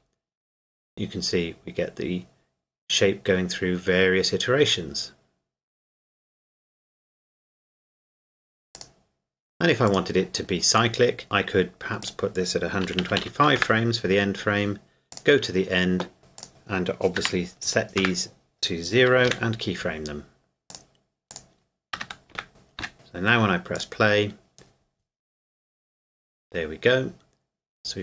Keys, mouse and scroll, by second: 8.8 click, 12.6 click, 12.8 KP_1, 13.0 KP_2, 13.2 KP_5, 13.6 KP_Enter, 15.1 click, 16.4 click, 17.2 KP_0, 18.0 KP_Enter, 19.2 |, 20.7 click, 22.0 KP_0, 22.3 KP_Enter, 22.8 |, 23.8 click.